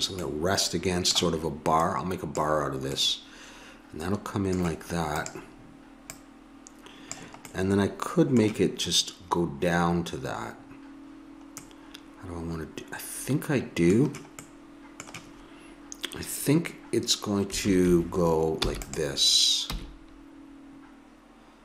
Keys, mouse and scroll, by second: 1.8-3.7 drag, 1.8 middle click, 3.0 middle click, 5.1-7.9 drag, 18.5 e, 19.6 g.